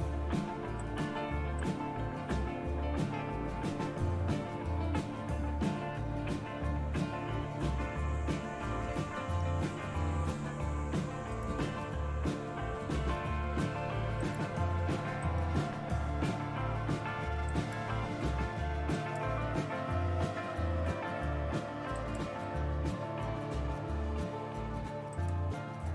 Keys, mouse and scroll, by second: 18.9-20.0 drag, 21.9 click, 22.7 click, 25.4 click.